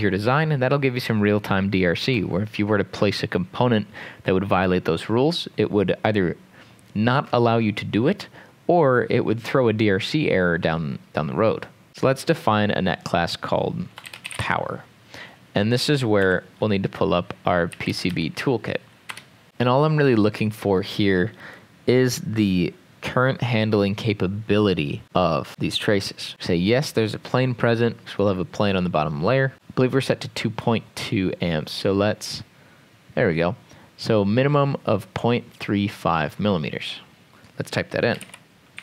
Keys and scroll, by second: 13.8-14.9 typing, 17.5-18.6 typing, 19.1 Return, 29.5 5, 37.9-38.8 typing.